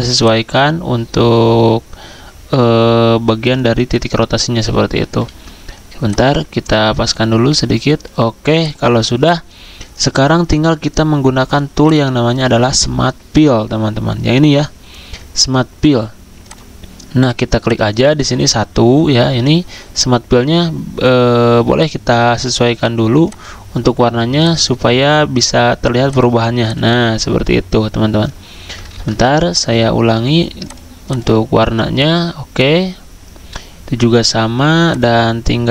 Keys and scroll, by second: 5.3 ctrl+z, 11.5 z, 28.9 ctrl+z.